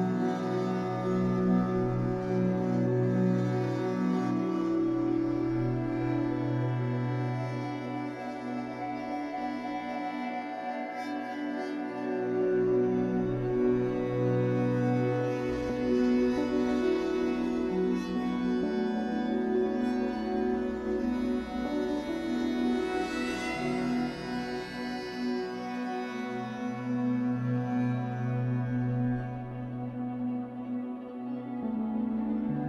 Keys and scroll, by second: 5.9 b, 8.5 b, 10.9 Escape, 14.7 Escape, 15.5 3, 16.8 ctrl+c, 18.5 w, 22.0 r, 26.6 Escape, 26.9 3, 28.2 r, 31.6 Escape, 32.1 3.